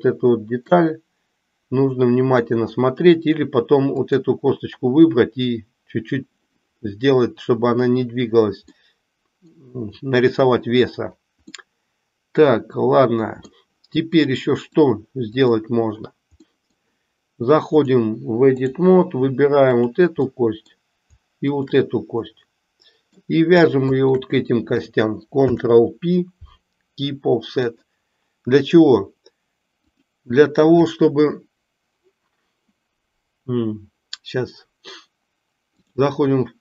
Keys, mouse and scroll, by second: 0.7-2.6 middle drag, 4.1 click, 8.7-9.7 middle drag, 11.6-13.6 middle drag, 14.6-15.6 drag, 16.4 middle click, 17.8-18.8 drag, 19.7 click, 20.3 middle click, 21.3 shift+click, 22.2-23.2 middle drag, 23.7 shift+click, 25.3 ctrl+p, 29.8-36.0 drag.